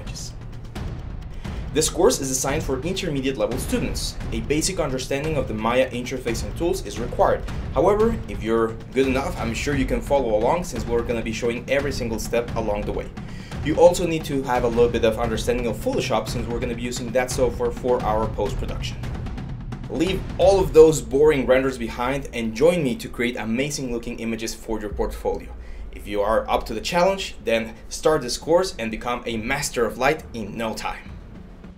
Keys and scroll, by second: 0.5 ctrl+z.